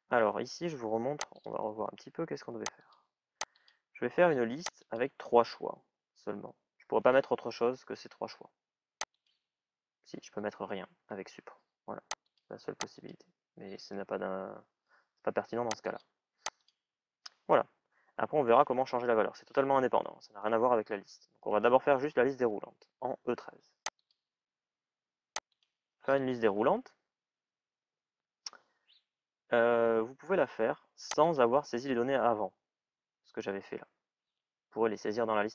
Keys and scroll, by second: 10.8 Delete.